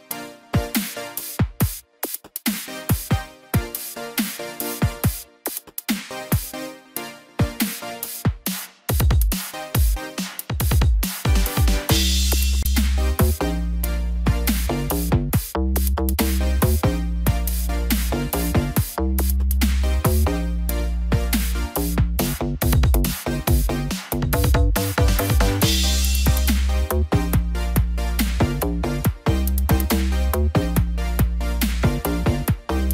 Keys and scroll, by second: 5.6 ctrl+t, 9.6 ctrl+j, 10.2 ctrl+t.